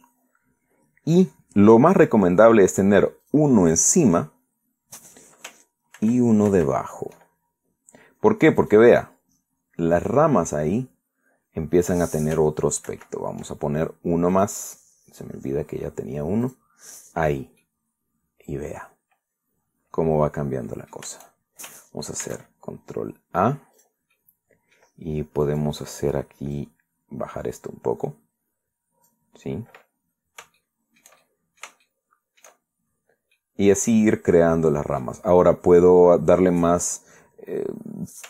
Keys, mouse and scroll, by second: 0.1 ctrl+2, 3.9 click, 6.7 ctrl+2, 9.3 right click, 13.6 ctrl+2, 15.0 click, 17.1 click, 18.3-21.8 middle drag, 22.0-23.5 shift+middle drag, 22.9 ctrl+a, 24.5 click, 24.8 middle click, 26.1 right click, 27.3-30.0 drag, 30.7 scroll up 2, 31.3 shift+middle click, 31.4 shift+click, 32.4 shift+middle click, 33.0 shift+middle click, 33.7 scroll down 2, 34.1-35.9 middle drag, 36.0-36.4 scroll up 2.